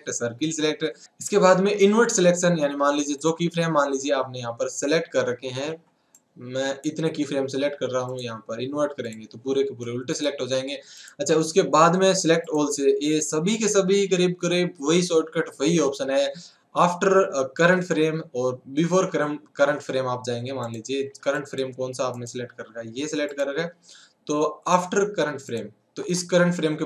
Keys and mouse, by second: 1.0 click, 3.3-4.9 drag, 4.5 a, 4.7 a, 5.1 a, 5.7 b, 8.1-9.1 drag, 11.8 click, 13.2 click, 20.7-22.2 drag, 24.1-25.1 drag.